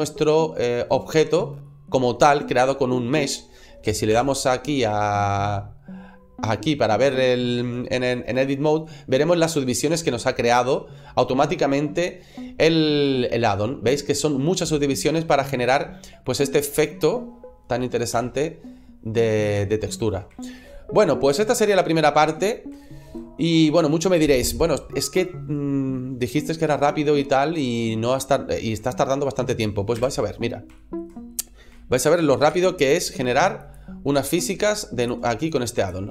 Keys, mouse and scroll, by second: 1.5 middle click, 4.5 Tab, 5.5-6.0 scroll up 4, 6.7 scroll up 1, 8.7 middle click, 9.3 scroll down 2, 9.7-10.1 scroll up 2, 10.4 middle click, 11.8 scroll down 2, 13.3 middle click, 15.2-16.1 scroll down 2, 16.1 middle click, 18.2 Tab, 19.1 scroll down 2, 19.6 shift+middle click, 20.4 shift+middle click, 21.4 shift+middle click, 21.9 scroll up 2, 22.7 shift+middle click, 23.2 scroll down 2, 23.5 middle click, 27.5 right click, 28.7 right click, 29.9 Delete, 30.2-30.5 scroll down 1, 30.6 shift+middle click, 31.1 middle click, 31.4 scroll up 1, 31.6 shift+middle click, 32.3 shift+a, 34.0 s, 34.9 click, 35.3 click, 36.0 click.